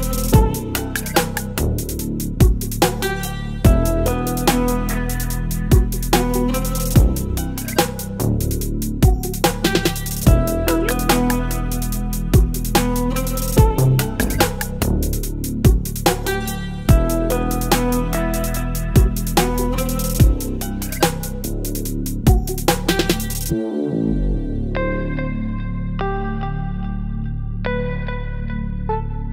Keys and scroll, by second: 1.4 Return, 2.8 space, 4.7 space, 8.5 space, 12.3 ctrl+e.